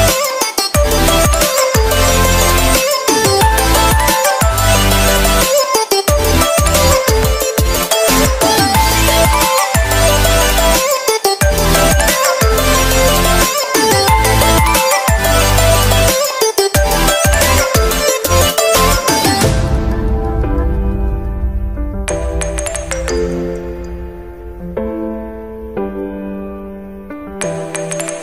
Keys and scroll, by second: 4.0 ctrl+t, 11.5 g.